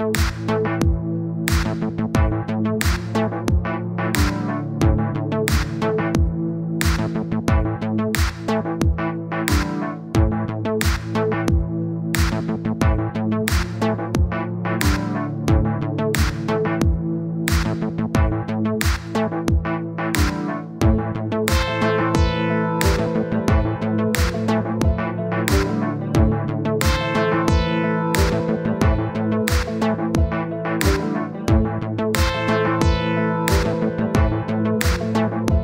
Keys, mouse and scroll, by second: 3.2 middle click, 3.7-6.3 drag, 6.3-6.7 scroll up 2, 6.7 click, 7.1 middle click, 7.5 scroll down 2, 7.6 middle click, 8.2-9.7 drag, 9.7 middle click, 10.1-10.5 scroll up 1, 10.5-11.6 drag, 11.6 middle click, 12.0 click, 12.4 scroll down 2, 12.5 middle click, 12.7 scroll up 2, 12.9 middle click, 13.2 scroll down 1, 13.5 click, 14.3 middle click, 15.2-16.3 drag, 16.3 middle click, 16.8 click, 17.3 middle click, 17.7-18.1 scroll up 2, 18.1 click, 19.0 middle click, 19.8-22.3 drag, 22.3 middle click, 23.0 scroll up 3, 23.1-23.4 scroll down 3, 23.4-24.7 drag, 24.7 middle click, 25.2-26.2 drag, 26.2 middle click, 26.8-29.0 drag, 29.0 scroll down 3, 29.1 middle click, 29.5 click, 30.0 middle click, 30.6 click, 31.2 middle click, 31.6 click, 32.5 middle click, 33.0-33.5 scroll up 1, 33.5 middle click, 34.3 click, 34.7 middle click, 35.2-35.6 drag.